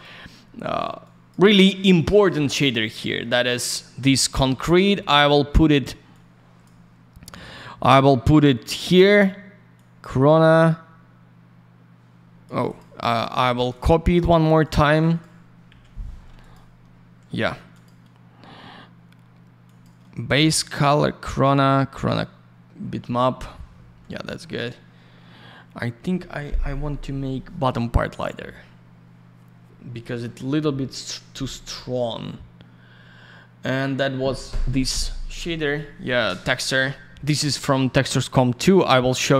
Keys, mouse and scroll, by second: 0.0 click, 1.0 click, 2.0 click, 2.1 click, 3.1 middle click, 3.2 middle click, 4.7 click, 5.3 middle click, 5.8 scroll up 1, 6.1 click, 6.8-7.2 scroll up 1, 7.5 click, 9.7 click, 12.7 click, 12.8 click, 13.1 click, 13.2 double click, 13.3-13.7 scroll down 1, 14.4 shift+click, 14.6 click, 15.7 Delete, 16.4 click, 16.5 click, 17.7 click, 17.8 click, 19.6 click, 19.8 click, 20.4 click, 33.7 click, 33.8 click, 35.6 click, 35.7 click, 38.0 click.